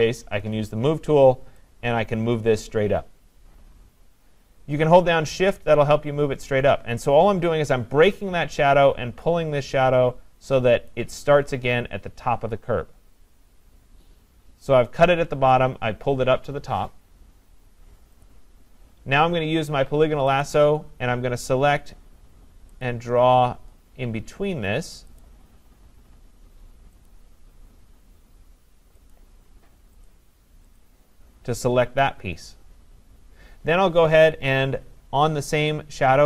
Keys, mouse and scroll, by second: 4.1 click, 10.9 shift+click, 18.3 click, 20.4 click, 22.8 click, 25.2 click, 27.1 click, 29.1 click, 30.1 click, 30.8 click, 35.7 click.